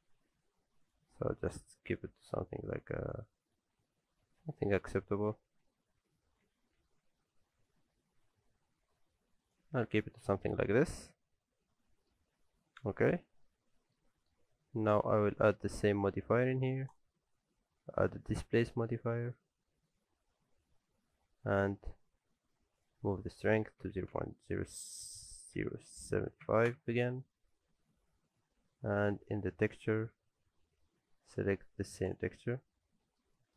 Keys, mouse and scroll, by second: 0.1 s, 1.1-1.8 scroll up 4, 1.5 s, 4.7-7.0 ctrl+z, 7.7 s, 9.6 alt+a, 9.9 Tab, 10.2 scroll down 1, 10.4 alt+a, 10.6 middle click, 12.3-12.9 scroll down 3, 12.9 shift+middle click, 13.6 scroll down 1, 13.8 middle click, 14.1 shift+middle click, 14.4-15.2 scroll up 3, 14.8 click, 15.2 scroll down 1, 15.4 middle click, 15.7 middle click, 16.9 click, 22.8 click, 28.0-29.7 scroll up 2, 29.7 click, 32.8 scroll down 2, 33.0 middle click, 33.3 shift+middle click.